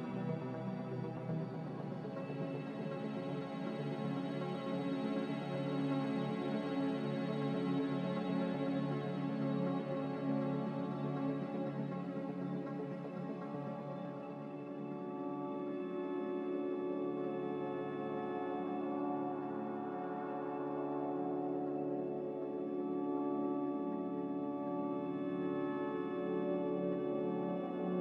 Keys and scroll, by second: 1.0-1.9 typing, 8.6-9.5 typing, 15.0 1, 18.5 a, 25.1 n.